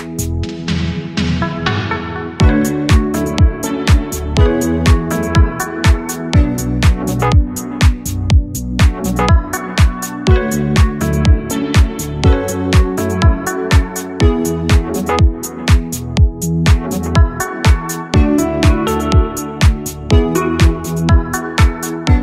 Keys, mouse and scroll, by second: 2.1 KP_Divide, 4.4 Tab, 4.9-6.1 middle drag, 6.1 click, 6.7-9.2 right drag, 10.8 KP_Divide, 12.0-13.9 middle drag, 14.1 Tab, 14.5 click, 14.8 click, 15.2 shift+click, 16.5 ctrl+j, 17.0 Tab, 18.0-19.7 middle drag, 19.9 alt+shift+click, 21.8-22.2 drag.